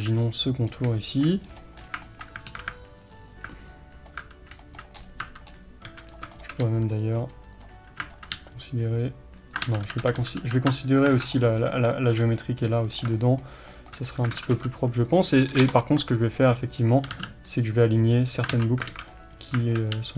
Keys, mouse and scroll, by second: 0.2 scroll down 1, 0.7 scroll up 2, 1.5-1.8 scroll up 2, 1.8 scroll down 2, 2.5 alt+a, 3.2 alt+click, 4.7-6.1 shift+middle drag, 5.0 scroll up 2, 5.3 1, 5.5-5.9 scroll up 2, 5.9 a, 6.1 drag, 6.6 g, 7.6 click, 8.4 g, 9.7 ctrl+z, 11.2 alt+a, 11.2-11.6 scroll down 1, 11.6-12.0 scroll up 1, 12.1 click, 12.2 g, 13.0 scroll down 1, 13.2-16.1 shift+middle drag, 14.1 scroll down 1, 14.4 alt+a, 15.1 b, 16.1 click, 17.1 s, 18.0 click, 18.6 ctrl+z, 19.0 alt+a, 19.1 click, 20.0 g.